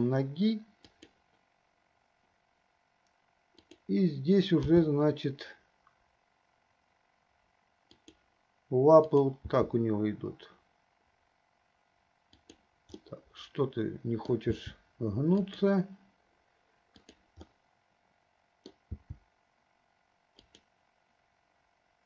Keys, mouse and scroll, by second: 3.7 click, 4.8 g, 9.3 click, 9.7 g, 13.3-16.0 middle drag, 14.8 g, 17.3 click, 17.8-20.8 middle drag, 19.0 g.